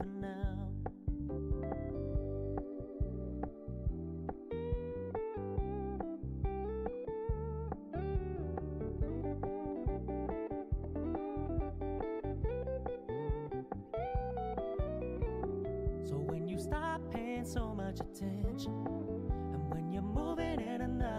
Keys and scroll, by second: 5.2 ctrl+t.